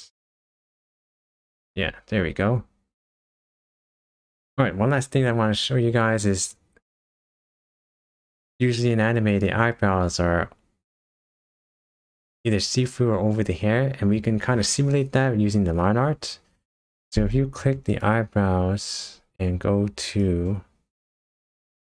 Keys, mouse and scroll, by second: 0.8 click, 2.0-3.0 scroll down 4, 3.0-3.7 scroll up 5, 4.3-4.7 scroll down 2, 5.9 scroll up 2, 6.7 scroll up 1, 17.9 click, 20.1 click.